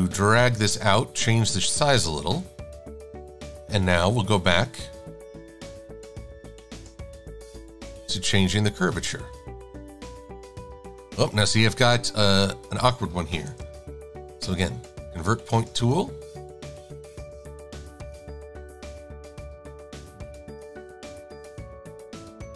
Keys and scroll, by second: 2.4 shift+x, 18.6 -.